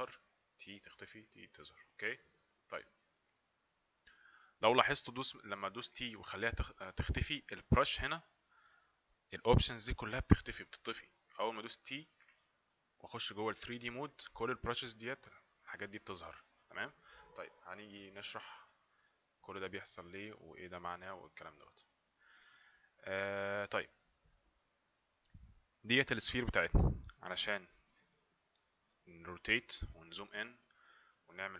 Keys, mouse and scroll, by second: 1.1 typing, 5.9 typing, 8.1 typing.